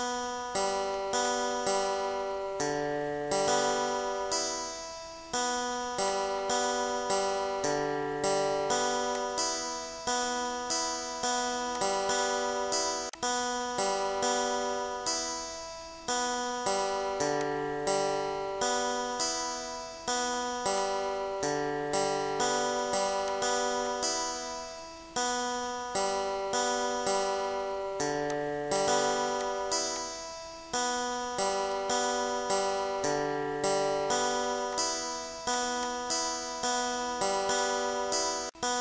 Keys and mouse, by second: 1.7-3.2 typing, 4.8 click, 6.4 click, 7.9 ctrl+shift+click, 10.0 shift+click, 10.4 click, 11.4 click, 12.2 click, 14.5 click, 15.8 click, 16.6 click, 17.1 click, 22.0 click, 25.8 click, 27.1 click.